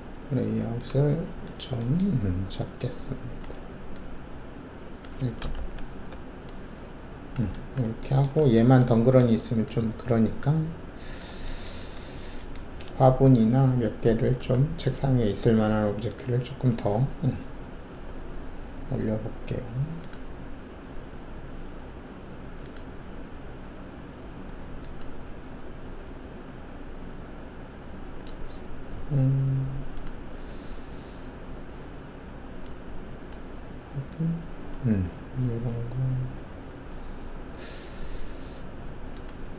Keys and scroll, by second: 5.5 ctrl+z.